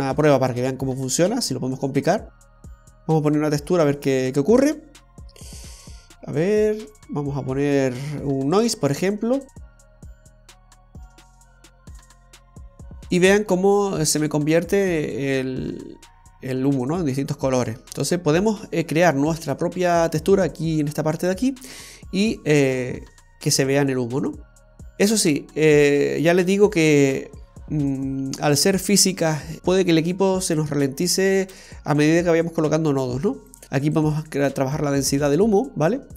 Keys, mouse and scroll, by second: 10.3 click, 13.7-14.6 scroll up 2, 14.6-15.3 scroll down 1, 15.3 middle click, 21.5 click, 24.4-26.5 scroll down 10, 30.8 click, 33.6-34.1 scroll up 3, 34.1 click.